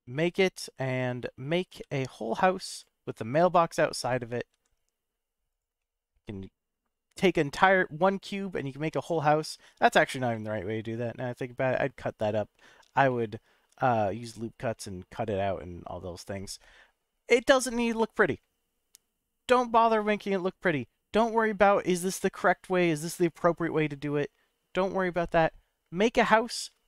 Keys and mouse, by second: 0.2 z, 1.7 y, 2.7 click, 3.0 middle click, 4.0 g, 4.5 x, 5.4 click, 5.9 middle click, 8.1 click, 9.4 middle click, 10.3 middle click, 12.6 middle click, 13.0 shift+middle click.